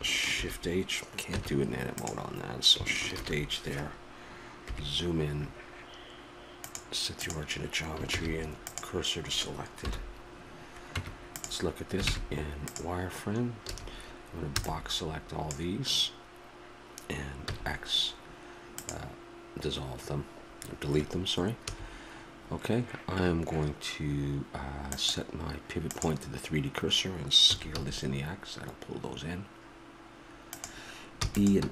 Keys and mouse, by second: 0.4 shift+h, 1.4 Tab, 3.1 shift+h, 4.7 KP_Decimal, 6.6-8.1 drag, 8.1 shift+s, 9.9 KP_7, 11.0 Tab, 12.1 ctrl+Tab, 13.7 a, 21.6 a, 24.9-26.8 drag, 27.5 s, 31.1 e.